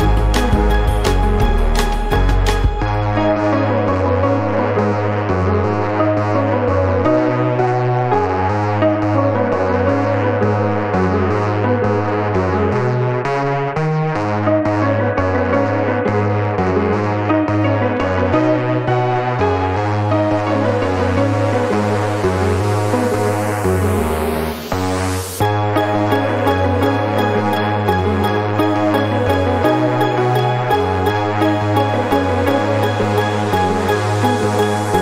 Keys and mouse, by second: 0.2 click, 2.1 click, 2.6 click, 3.7 ctrl+a, 5.8 click, 6.2 space, 7.8-10.2 drag, 10.7 click, 14.5 ctrl+shift+f, 16.3 click, 18.7 click, 21.0 click, 22.8 click, 24.8-25.9 drag, 26.0 click, 27.4 click, 29.4 click, 31.2-32.2 drag, 33.5-35.0 drag.